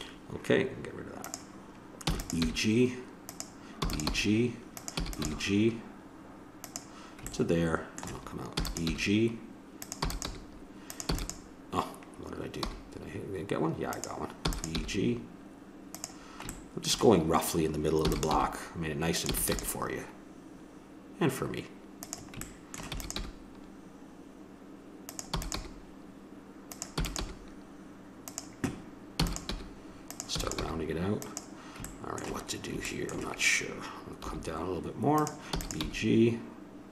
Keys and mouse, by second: 1.2-2.8 drag, 2.0 e, 2.4 g, 3.7 e, 4.1 g, 5.0 e, 5.2 g, 8.6 e, 8.9 g, 10.0 e, 10.2 g, 12.6 g, 14.5 e, 14.8 g, 18.1 e, 18.4 g, 19.3 e, 19.5 g, 23.0 e, 23.2 g, 25.3 e, 25.6 g, 27.0 e, 27.2 g, 29.2 e, 29.5 g, 30.3 e, 30.6 g, 34.2 g, 35.5 e.